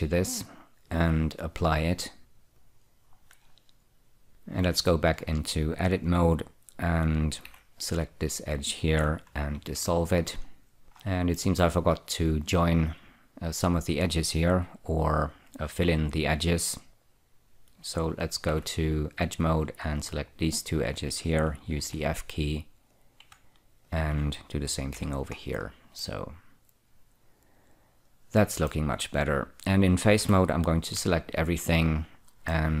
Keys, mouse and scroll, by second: 0.7 click, 2.3 click, 2.9 click, 3.6-4.3 scroll down 1, 5.0 Tab, 5.5-6.8 scroll up 3, 7.8 2, 8.3 click, 9.8 ctrl+x, 10.5 scroll down 4, 11.0-11.5 scroll up 2, 11.7 shift+middle click, 12.2-14.1 scroll up 2, 18.8 2, 19.5 click, 21.2 shift+click, 22.1 f, 23.2 click, 24.1 shift+click, 25.3 f, 25.7-26.3 scroll down 4, 26.3-29.2 middle drag, 30.5 3, 31.3 3, 32.0-32.8 scroll up 2.